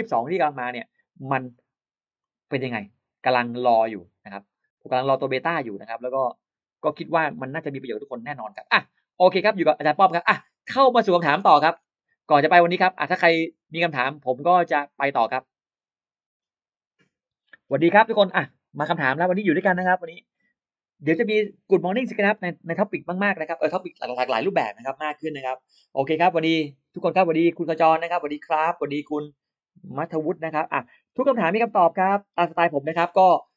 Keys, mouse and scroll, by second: 0.5 click, 2.0 click, 7.6 click, 8.9 click, 10.8 click, 11.3 middle click, 13.0-14.3 drag.